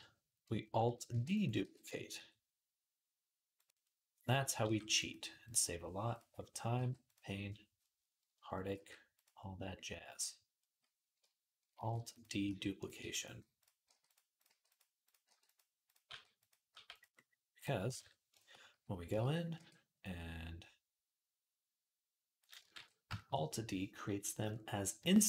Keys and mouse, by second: 0.9 alt+d, 1.4 g, 4.7 g, 5.9 click, 6.5-13.4 middle drag, 6.5 g, 8.5 alt+d, 11.6 alt+d, 12.3-16.5 typing, 13.4 click, 13.6 middle click, 14.2 click, 14.3-15.7 middle drag, 15.7 click, 15.9-17.3 middle drag, 17.3 click, 17.4-18.8 ctrl+middle drag, 17.7 ctrl+Tab, 18.8-22.9 drag, 18.9 z, 19.4 r, 22.5 ctrl+r, 22.9-25.2 shift+middle drag.